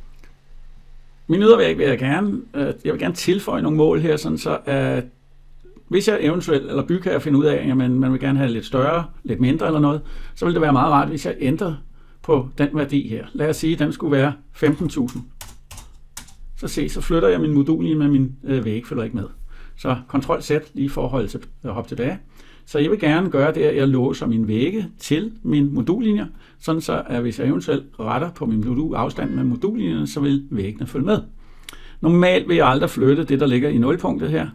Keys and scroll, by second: 16.0 Return, 19.9 ctrl+z.